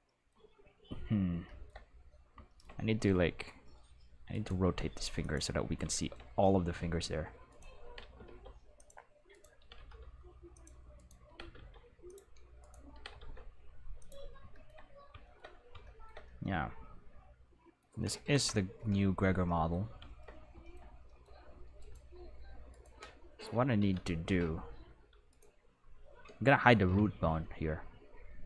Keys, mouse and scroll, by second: 2.9 r, 4.3 right click, 4.6 r, 5.2 click, 5.8-6.6 shift+middle drag, 7.5 right click, 7.8 r, 8.1 x, 8.3 x, 8.7 click, 9.3 right click, 9.6 r, 9.7 x, 9.9 x, 10.5 click, 11.0 right click, 11.2 r, 11.4 x, 11.6 x, 12.0 click, 12.6 right click, 12.9 r, 13.1 x, 13.2 x, 14.0 click, 14.5-15.0 shift+middle drag, 18.3 Home, 20.6 shift+middle drag, 22.7 right click, 25.3 right click, 26.8 n.